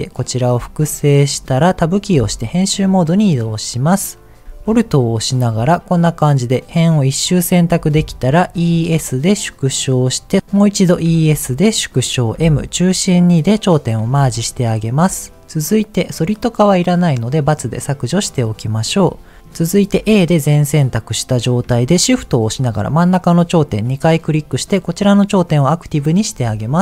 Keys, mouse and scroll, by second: 0.4-1.4 right drag, 1.8 Tab, 3.0 middle click, 4.8 alt+click, 6.2-7.7 middle drag, 8.4 e, 8.7 s, 9.7 click, 11.1 e, 11.9 click, 11.9 s, 12.3 m, 14.9 middle click, 17.4 click, 18.2 middle click, 18.6-19.2 scroll up 1, 19.4 shift+middle click, 19.4 click, 20.3 a, 20.7 middle click, 21.2-21.6 scroll up 1, 21.8 shift+middle click, 22.6 shift+click, 23.2 shift+click, 26.0 middle click.